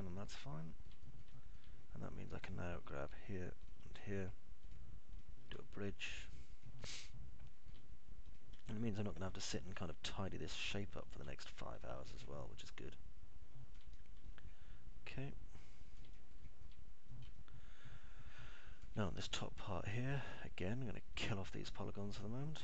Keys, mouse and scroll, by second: 0.0-2.0 alt+middle drag, 2.2 middle click, 2.7 alt+middle click, 5.8 ctrl+click, 8.3 alt+middle click, 9.3 click, 11.8 ctrl+click, 13.3-15.0 alt+middle drag, 15.3-17.2 alt+middle drag, 17.3 middle click, 18.7-20.0 alt+middle drag, 20.7 alt+middle click.